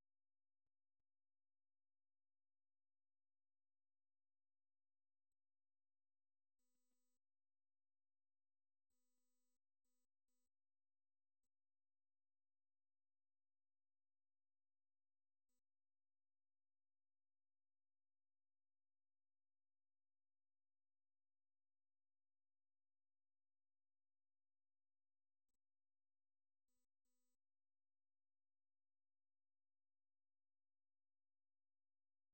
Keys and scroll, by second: 25.6 ctrl+w.